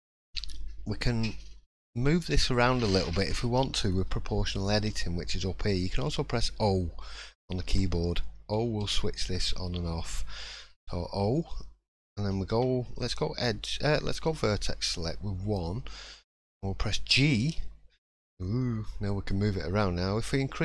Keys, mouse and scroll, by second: 14.1 click, 14.6 middle click, 15.8-16.1 scroll up 1, 16.3 shift+middle click, 17.0 g.